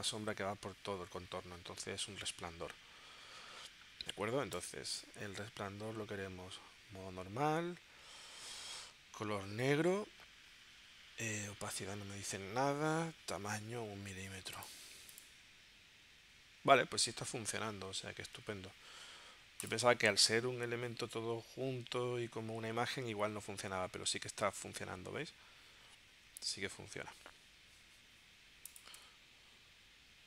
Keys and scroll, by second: 29.0 w.